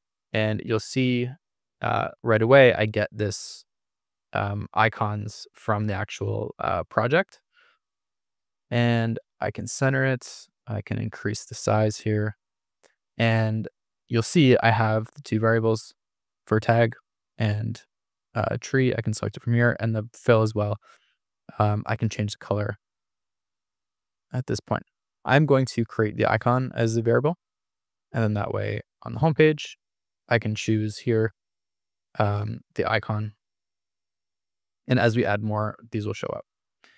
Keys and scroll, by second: 6.8 super+=, 7.7 super+=, 24.1 super+z.